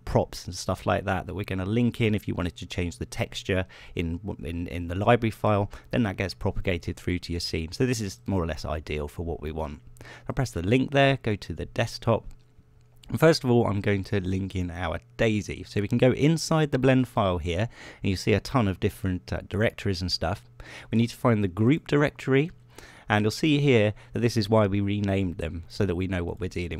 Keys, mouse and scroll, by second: 9.3 click, 11.4 click, 15.7 click, 23.0 click.